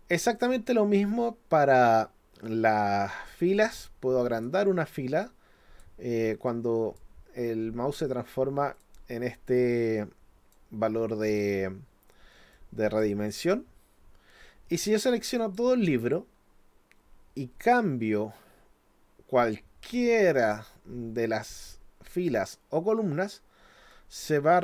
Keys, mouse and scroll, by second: 3.6 click, 5.2 click, 6.5 click, 8.8 click, 10.0 click, 12.5 click, 15.4 click, 23.9-24.6 drag.